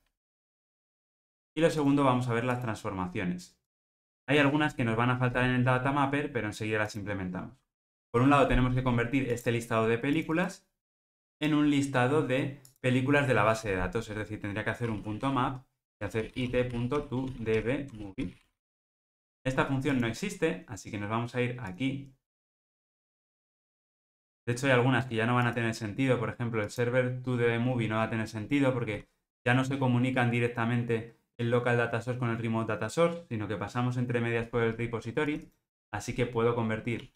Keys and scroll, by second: 0.2 Escape, 15.9 Return.